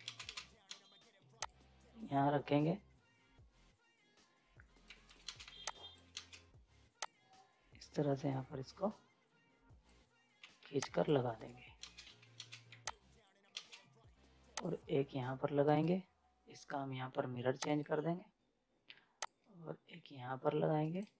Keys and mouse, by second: 0.1 ctrl+space, 1.4-4.8 drag, 4.8 z, 5.0 right click, 5.3 space, 5.5 z, 5.7 click, 6.1 ctrl+space, 7.0-10.4 drag, 10.4 z, 10.8 click, 11.3 right click, 11.8 ctrl+space, 12.0 z, 12.3 ctrl+space, 12.6 z, 12.8 click, 13.5 ctrl+space, 14.6 click, 15.7 ctrl+right click, 17.6-20.8 drag, 20.8 ctrl+right click.